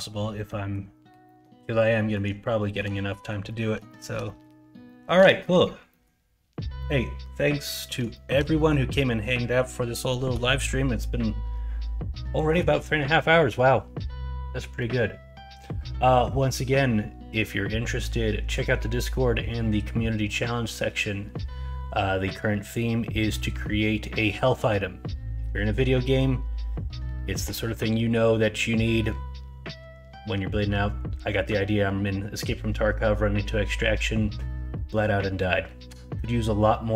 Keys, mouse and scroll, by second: 0.4 middle drag, 1.2 middle click, 1.9 middle drag, 2.6 shift+middle drag, 3.1 middle drag, 3.4 middle drag, 3.8 shift+middle drag, 4.2 middle drag, 4.8 shift+middle drag, 5.4 middle drag, 5.8 middle click, 6.7 middle drag, 7.7 middle drag, 8.1 shift+middle drag, 8.5 middle drag.